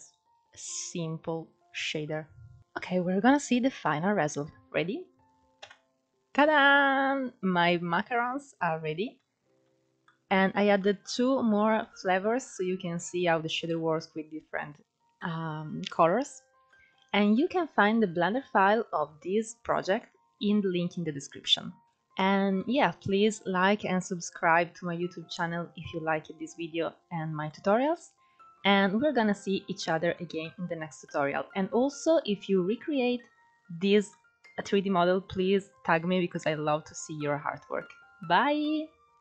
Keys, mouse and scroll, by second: 5.3 KP_0, 8.2-8.5 scroll down 2, 8.8-9.3 middle drag, 9.3-9.7 scroll up 3, 9.7-14.6 middle drag, 14.6 scroll down 1, 14.7-15.4 middle drag, 15.4-16.2 scroll up 1, 16.2-18.9 shift+middle drag, 18.9-19.5 scroll up 1, 19.5-21.8 middle drag, 21.8 click, 21.9 scroll down 2, 22.2-22.6 middle drag, 22.6-23.4 scroll up 2, 23.4-24.8 scroll down 2, 24.8-25.3 scroll up 1, 25.3-28.5 middle drag, 28.5-29.3 scroll up 1, 29.3-29.8 scroll down 1, 29.8-39.2 middle drag.